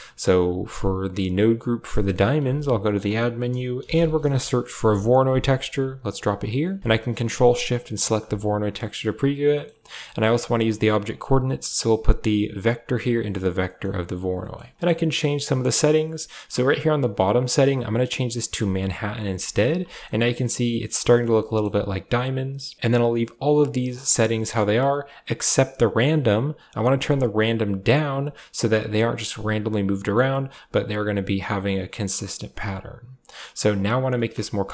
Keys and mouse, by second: 1.7 click, 2.4 shift+a, 7.8 ctrl+shift+click, 9.4 click, 9.7 click, 10.9 click, 12.5 click, 13.5 click, 13.5 middle click, 15.3 click, 15.3 middle click, 16.8-18.5 drag, 19.3 shift+middle click, 19.8 shift+middle click, 21.4 shift+middle drag, 26.5-28.0 drag, 28.9-30.1 drag, 33.1 click, 33.7 click, 34.0 middle drag.